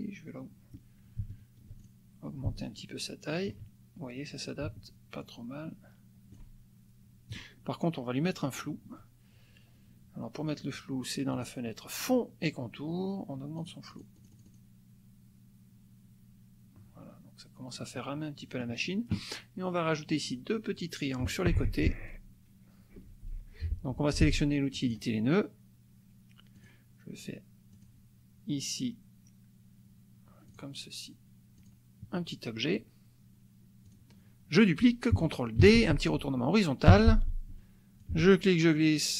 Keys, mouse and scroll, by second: 1.8 ctrl+shift+click, 2.6-3.6 ctrl+shift+drag, 5.2-6.5 ctrl+shift+drag, 11.3 click, 13.5 click, 17.8 click, 23.1 shift+F6, 24.9 click, 26.5 click, 27.7 click, 30.5 click, 31.6 click, 33.8 click, 35.6 ctrl+d, 36.9 h, 38.0-39.1 ctrl+drag.